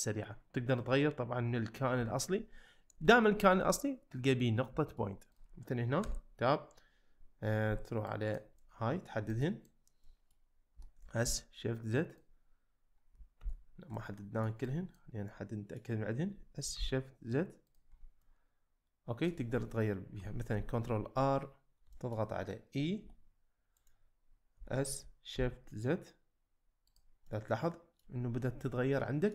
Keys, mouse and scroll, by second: 0.7 click, 3.1 shift+middle drag, 4.8 shift+middle click, 6.0 Tab, 7.6 1, 8.3 click, 8.6 middle click, 9.5 click, 10.1 middle click, 10.7 s, 11.2 shift+z, 12.1 click, 13.4 ctrl+z, 13.9 middle click, 14.8 click, 15.3 middle click, 16.3 s, 16.8 shift+z, 17.6 click, 18.2-19.3 middle drag, 20.6 ctrl+r, 21.7 z, 21.9 shift+middle click, 24.6 e, 24.6 s, 25.4 shift+z, 27.3 middle click, 28.6 middle click.